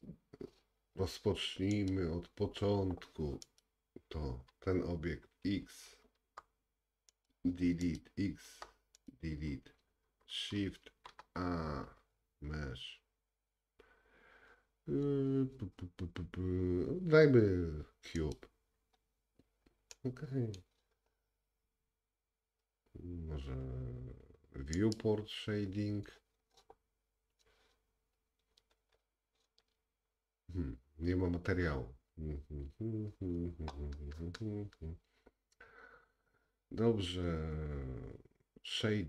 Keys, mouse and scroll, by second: 0.0-2.0 drag, 3.5 click, 3.6-6.2 middle drag, 6.2 x, 7.9 click, 8.5 x, 10.8 shift+a, 19.9 middle click, 24.9 click, 28.8-29.8 scroll up 2, 29.8 scroll down 1, 29.8-32.0 scroll down 1, 32.0-33.0 scroll down 1.